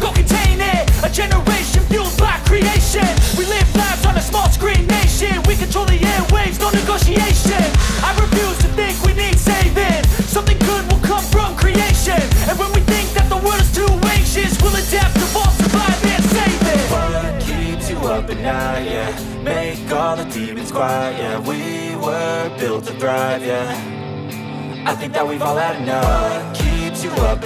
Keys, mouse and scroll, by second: 3.6 ctrl+z, 5.4 ctrl+z, 10.1 space, 16.0 space, 16.3 ctrl+z, 20.6 space.